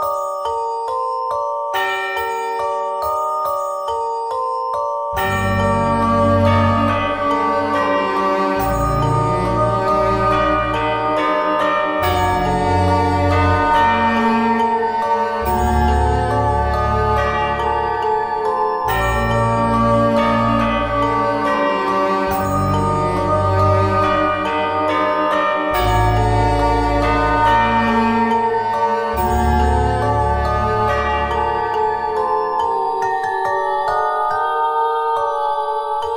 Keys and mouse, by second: 4.2 w, 7.3 w, 8.6 ctrl+z, 9.4 x, 13.0 ctrl+Tab, 29.1 Tab, 29.7 ctrl+a, 30.4 Tab, 31.6 w, 34.9 s.